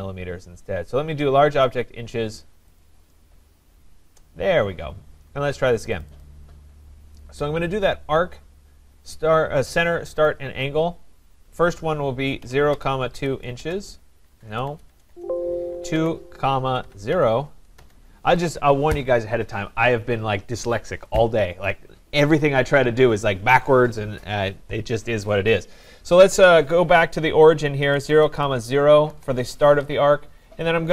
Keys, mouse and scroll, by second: 1.7 click, 2.8 click, 6.0 click, 6.2 click, 10.2 click, 12.2-17.2 typing, 12.2 click, 17.8 Return, 27.6-28.8 typing, 29.1 Return.